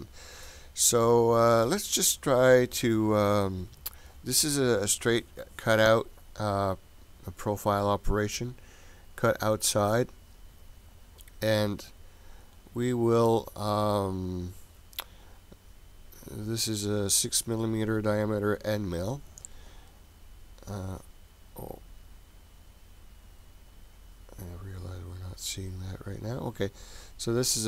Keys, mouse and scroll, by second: 6.4-9.3 scroll down 2, 9.3-10.9 scroll down 3, 10.9-12.6 scroll down 2, 12.6-13.4 scroll down 2, 13.4-14.3 scroll down 2, 14.3-15.8 scroll down 7, 15.8-16.5 scroll down 2, 16.5-20.3 scroll down 1, 22.2-22.8 scroll down 2, 22.8-24.7 scroll up 1.